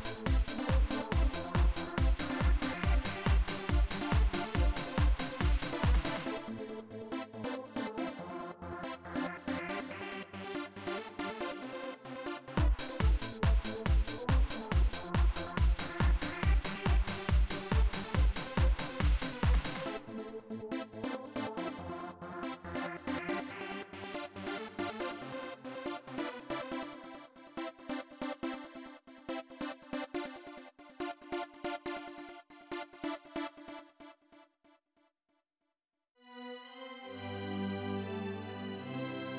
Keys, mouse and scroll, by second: 8.0-10.7 drag, 11.3 right click, 12.3 click, 13.7-15.2 drag, 18.4 click, 20.4 click, 22.9 click, 27.7 click, 31.5 click, 32.4 click, 34.0-35.9 drag, 37.1 click.